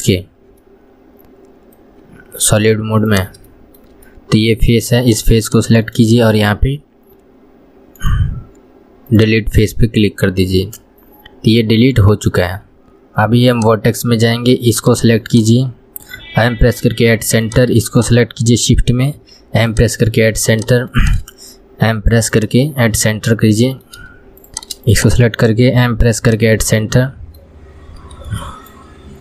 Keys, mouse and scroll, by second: 0.6-1.0 scroll up 1, 1.0-3.4 middle drag, 3.4 click, 3.8-5.3 shift+middle drag, 5.3 click, 5.7 shift+click, 6.2-10.0 right drag, 10.0-13.0 middle drag, 13.8-15.1 drag, 15.6 shift+click, 17.7 click, 18.2 shift+click, 20.8 click, 21.2 shift+click, 23.2-24.7 middle drag, 24.7 click, 25.2 shift+click, 27.1 middle click, 28.0 scroll up 1, 28.6 shift+middle click.